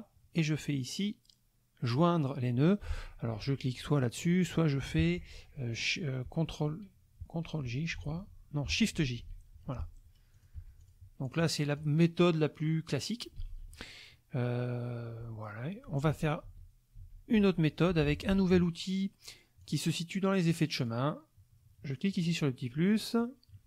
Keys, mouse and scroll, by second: 8.1 ctrl+j, 9.0 shift+j, 10.3 click, 10.5 F1, 10.8 click, 11.3 click, 13.4 ctrl+z, 16.1 ctrl+z, 18.1 ctrl+F2, 18.2 ctrl+click, 19.6 click, 20.8 click, 22.1 click, 23.2 click.